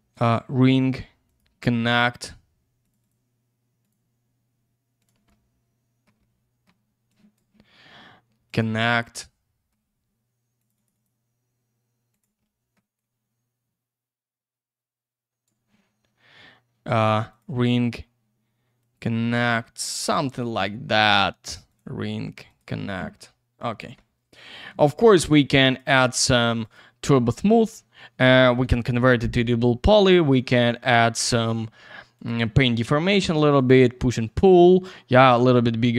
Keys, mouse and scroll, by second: 0.1 click, 1.2 click, 2.8 click, 3.0 click, 3.8 click, 5.0 click, 5.3 alt+middle click, 6.2 middle click, 7.1 click, 9.3 alt+middle click, 10.6 click, 10.7 click, 10.8 double click, 10.9 click, 12.1 click, 12.4 alt+middle click, 13.0 click, 17.3 click, 18.8 click, 20.2 click, 21.7 click, 22.5 click, 23.1 alt+middle click, 24.8 click, 25.6 click, 26.6 click, 27.3 alt+middle click, 28.3 middle click, 31.2 click, 32.1 click, 33.9 alt+middle click.